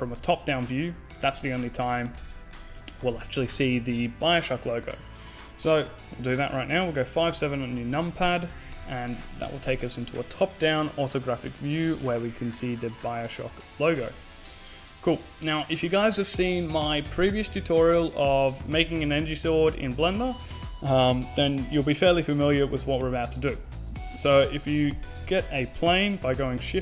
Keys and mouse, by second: 0.0 x, 2.3 n, 3.8 t, 7.4 t, 8.1 KP_5, 8.2 KP_7, 10.5 shift+c, 14.5-17.3 middle drag, 25.7 shift+a.